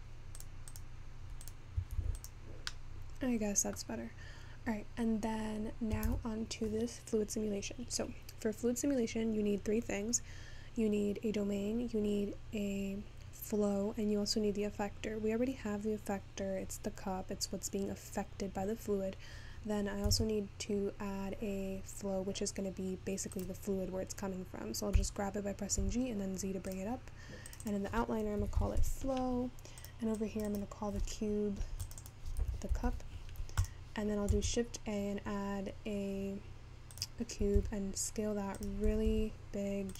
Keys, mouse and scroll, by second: 0.6 click, 1.1 click, 5.9-10.4 scroll down 3, 17.4-20.6 scroll up 4, 24.1-25.0 scroll down 3, 25.0 g, 34.6 shift+a.